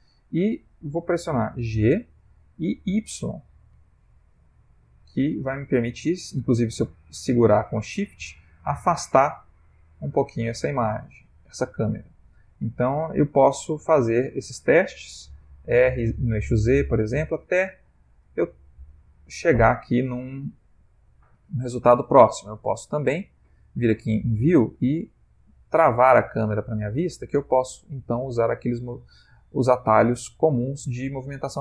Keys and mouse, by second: 3.8 g, 13.0 g, 15.1 r, 19.2 shift+middle click, 21.3 shift+middle click, 23.4 click, 25.8 click, 27.0 ctrl+middle click, 28.6 shift+middle click.